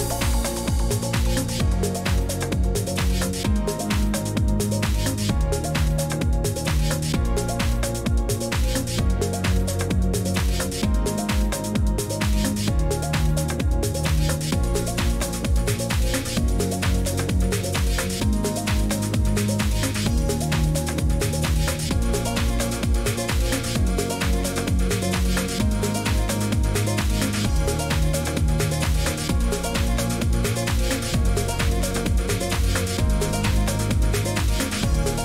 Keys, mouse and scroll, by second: 0.1 typing, 1.1-4.8 scroll, 5.8 click, 7.6 click, 11.0 click, 12.0 click, 12.7 click, 14.1 right click, 14.5 Escape, 17.2 click, 18.6 click, 20.6 right click, 23.7 click, 24.5-26.0 typing, 26.5 click, 29.2 click, 30.3 typing, 31.1 click, 32.8 click, 34.5 click, 34.9-35.2 scroll.